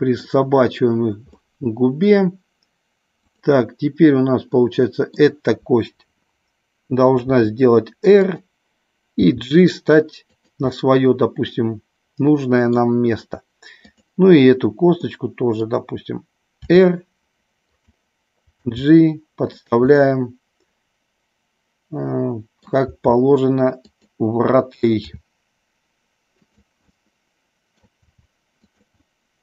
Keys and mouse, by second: 1.3 middle click, 3.3 click, 4.5 middle click, 7.1 r, 8.1 click, 9.2 g, 10.3 click, 10.6-12.6 middle drag, 13.8 click, 14.9 middle click, 16.6 r, 17.8 click, 18.5 g, 19.4 click, 19.9-22.7 middle drag, 22.8 g, 23.8 click, 25.0 r, 26.3 click, 26.8 middle click, 28.0 r, 28.6 click, 29.0-29.4 middle drag.